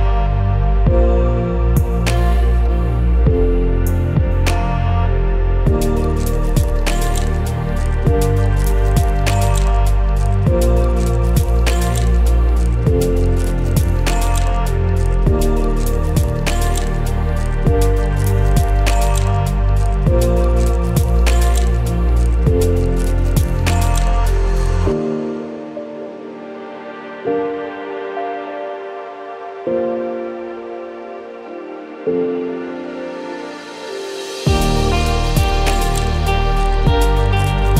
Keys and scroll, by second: 3.9 ctrl+c, 4.0 ctrl+f, 9.7 ctrl+z, 10.5 ctrl+shift+a, 11.1 ctrl+c, 11.4 ctrl+f, 18.3 ctrl+shift+a, 35.6 ctrl+shift+a.